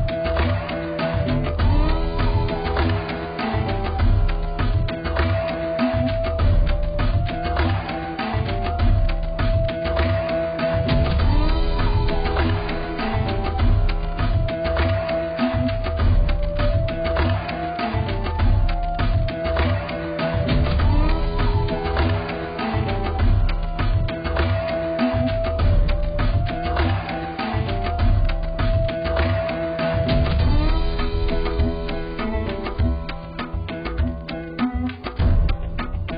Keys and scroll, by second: 8.5 d.